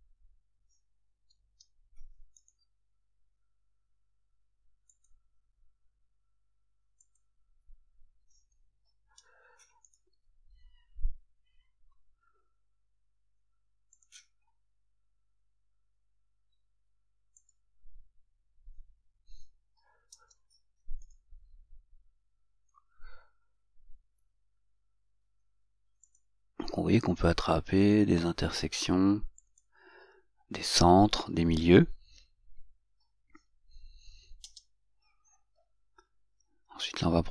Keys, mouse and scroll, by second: 1.6 Return, 2.6 right click, 5.2 click, 7.2 click, 9.3 Return, 10.1 right click, 14.2 click, 20.3 Return, 21.2 right click, 26.3 click, 29.6 click, 34.7 Return.